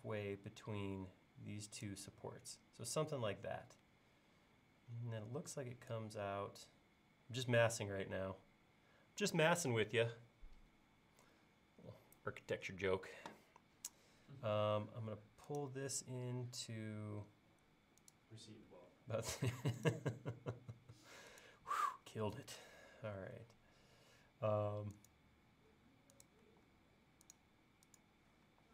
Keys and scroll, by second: 23.2 l, 26.4 l, 28.5 e.